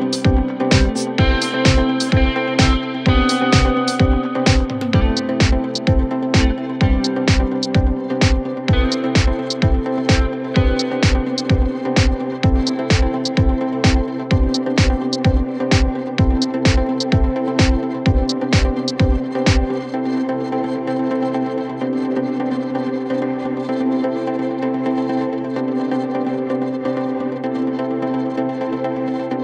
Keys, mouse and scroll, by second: 0.0-1.1 scroll up 6, 1.1-1.5 scroll down 6, 1.5 scroll, 2.9 scroll up 6, 3.6 typing, 5.0-5.4 scroll down 3, 5.4-7.0 typing, 5.7 scroll down 1, 5.9 scroll up 5, 6.7 scroll up 3, 8.1-8.7 scroll down 16, 8.7 typing, 9.3 scroll down 3, 9.5-9.9 scroll up 8, 9.9-10.7 typing, 10.8-11.4 scroll up 15, 13.4-14.0 scroll down 23, 14.0-14.8 scroll up 13, 14.9 middle click, 16.6-17.2 scroll down 7, 16.9 space, 17.8 s, 17.9 scroll up 3, 19.4-20.0 scroll down 14, 20.1 s, 20.4 middle click, 20.8 scroll down 5, 21.8-22.4 scroll up 14, 22.4 scroll down 5, 22.5 middle click, 22.8-23.7 scroll up 7, 23.7 m, 24.0 scroll up 3, 24.1 scroll down 1, 24.5 scroll up 4, 25.1 m, 26.4-27.5 scroll down 6, 27.8-29.3 typing, 29.0-29.3 scroll up 13.